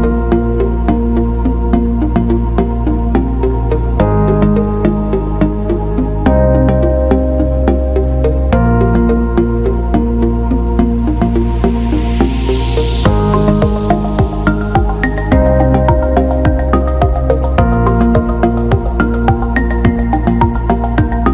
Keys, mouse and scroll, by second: 1.2 click, 2.7-4.3 drag, 7.0-8.2 drag, 8.3 ctrl+i, 10.7 click, 12.0-13.2 drag, 14.2 click, 17.3-19.6 drag, 20.1 ctrl+z.